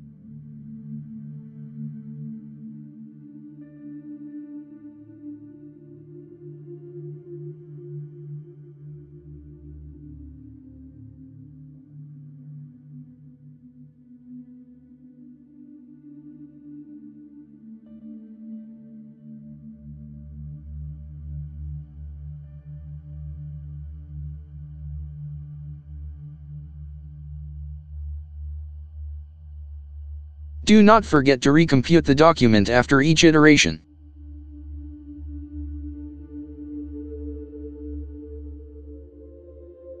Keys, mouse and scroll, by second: 2.9-5.1 typing, 6.9-8.2 typing, 11.2 shift+9, 12.5-14.0 typing, 18.2 shift+0, 19.0 Left, 20.7 [, 22.4 Right, 24.4 ], 26.9 Right, 28.6 ctrl+Return, 30.1 Tab, 31.2-33.1 typing, 34.1 typing, 34.9 Return, 38.6-40.0 typing.